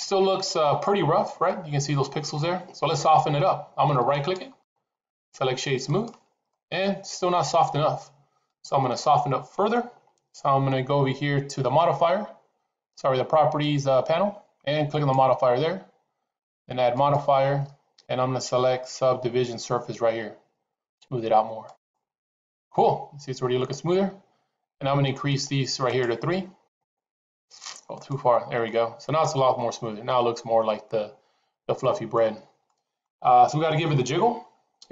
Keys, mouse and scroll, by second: 1.3-2.0 middle drag, 3.9 right click, 6.3-8.8 middle drag, 14.9 click, 16.9-21.7 drag, 25.2 click, 25.7 click, 26.6 click, 27.0 click, 28.6-32.0 middle drag, 32.5-32.9 middle drag, 33.8-34.9 middle drag.